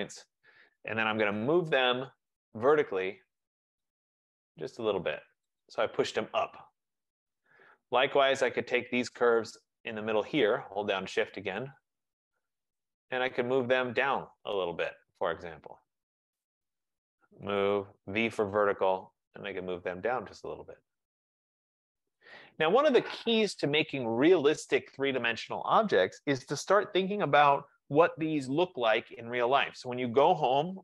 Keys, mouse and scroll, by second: 0.0 shift+click, 1.3-3.4 typing, 3.9 click, 5.4-7.9 typing, 5.7 click, 9.2 right click, 10.2 click, 11.9 click, 14.3 click, 16.6 click, 17.4-18.3 typing, 19.4 click, 22.2-23.0 typing, 22.4 click.